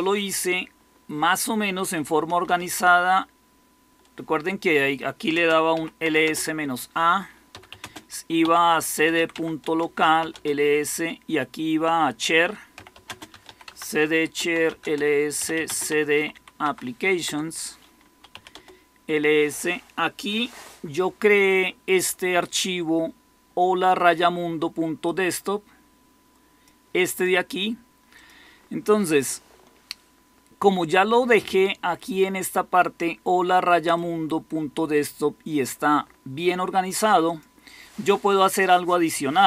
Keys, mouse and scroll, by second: 2.0-2.9 typing, 5.2-6.1 typing, 7.2-10.6 typing, 12.4-18.5 typing.